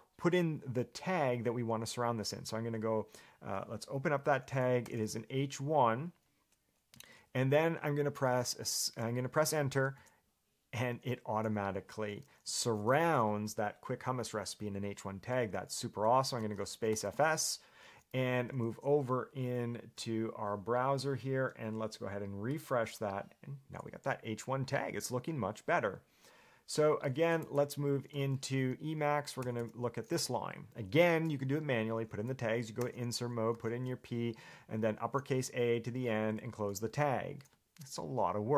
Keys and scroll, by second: 4.4 shift+s, 5.0 h, 7.1 1, 10.2 Return, 12.6-13.7 typing, 15.6 Escape, 29.6 j, 29.8 j, 32.8-36.4 typing.